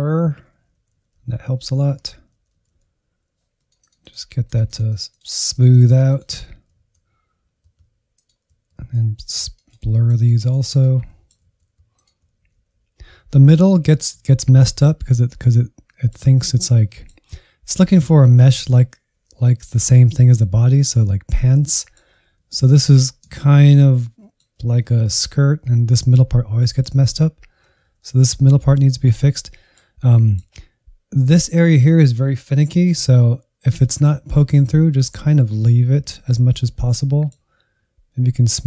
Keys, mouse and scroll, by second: 0.6 middle click, 0.9 click, 1.3 middle click, 1.5 alt+z, 1.8 ctrl+click, 2.4 alt+z, 2.5-4.6 drag, 4.6 alt+z, 5.6-6.8 drag, 7.1 alt+z, 7.4 click, 7.8 middle click, 8.0 click, 8.5 middle click, 8.7 alt+z, 9.3 alt+z, 9.4 middle click, 9.6-11.0 drag, 11.0 middle click, 11.7 Left, 11.8 Left, 12.0 Left, 12.0-12.6 Right, 12.8 Right, 13.1 Left, 13.6 middle click, 14.1 Right, 14.7 Right, 15.0-15.8 scroll up 2, 15.8-19.0 middle drag, 19.0 scroll down 2, 19.3-22.2 middle drag, 22.2 Left, 22.4 Left, 22.6 Left, 22.8 Left, 23.0 Left, 23.2 Left, 23.4-24.6 middle drag, 24.6 Left, 24.8 Left, 25.3 Right, 25.5 Right, 25.7 Right, 26.4 middle click, 27.0 Right, 27.2 Right, 27.7 Left, 27.9 Left, 28.1 Left, 28.3 Right, 28.7 Right, 29.0 Right, 29.1 Right, 29.5 middle click, 29.9 Right, 30.1 middle click, 30.5-32.6 scroll up 1, 32.6 shift+middle click, 33.0 Right, 33.2 Right, 33.7 middle click, 34.3 Left, 34.5 Left, 35.0 Right, 35.2 Right, 35.6-36.8 scroll up 3, 36.8-38.6 middle drag.